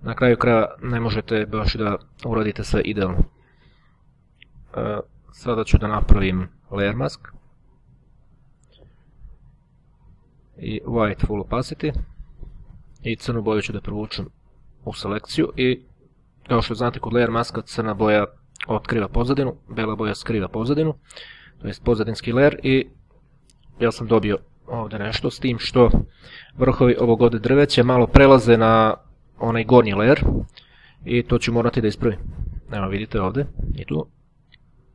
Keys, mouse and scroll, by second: 0.0-1.3 ctrl+scroll down 1, 4.4 click, 8.4 right click, 10.0 click, 11.4 click, 12.6-13.8 drag, 25.3 click, 32.0 click.